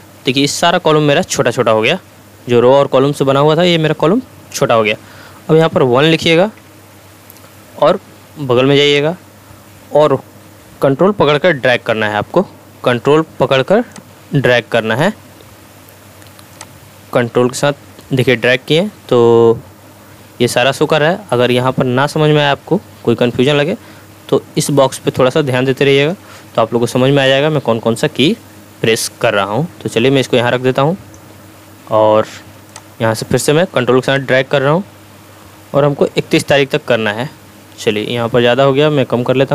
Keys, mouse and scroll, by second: 30.0-31.3 drag, 34.4-39.5 ctrl+drag.